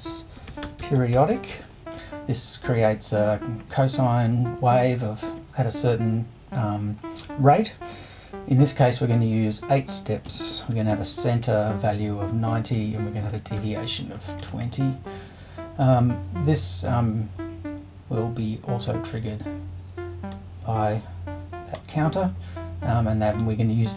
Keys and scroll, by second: 0.1-2.6 typing, 9.5-11.4 typing, 12.7 space, 13.3 2, 13.6 0.